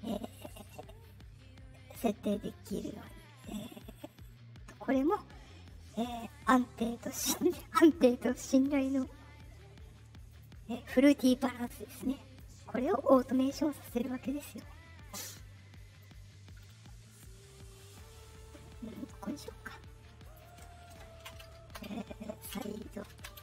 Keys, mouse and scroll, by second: 4.9 click, 6.1 click, 7.3 click, 10.2 click, 11.9-12.3 drag, 12.7 right click, 13.8 click, 15.0-18.9 drag, 19.5 scroll down 2, 20.2 click, 23.1-23.4 typing.